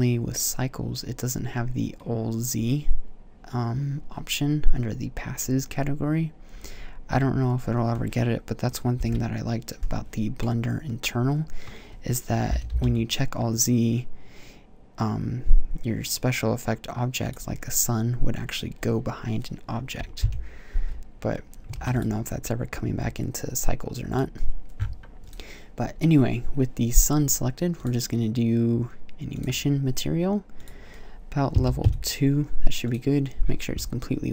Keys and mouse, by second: 8.8 KP_Decimal, 12.3 g, 17.2-20.0 drag, 20.0 KP_0, 21.6 ctrl+s, 30.4-32.3 drag, 32.7 click.